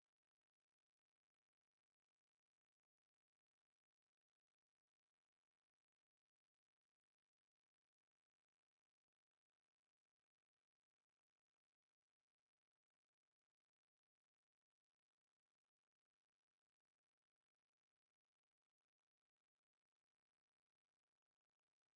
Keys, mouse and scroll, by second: 0.1 middle click, 1.1 middle click, 1.9 middle click, 2.4 Tab, 2.8 right click, 3.8 r, 10.1 right click, 10.8-12.0 drag, 12.0 middle click, 12.5 e, 14.8 shift+s, 16.8 r, 20.1-21.9 middle drag, 21.1 e.